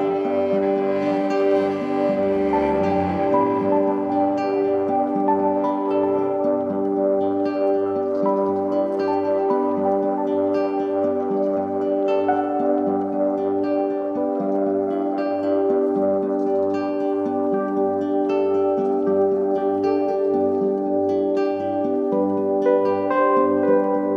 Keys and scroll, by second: 6.7 a, 9.0 super+j, 15.5 v, 16.5 i, 17.4 v.